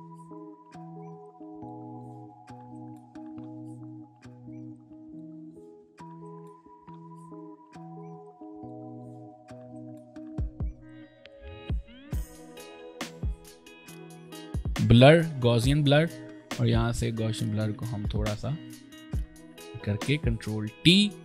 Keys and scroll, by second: 0.6 b, 3.6 ctrl+alt+space, 4.6 ctrl+alt+space, 19.8 ctrl+y, 20.8 ctrl+alt+y.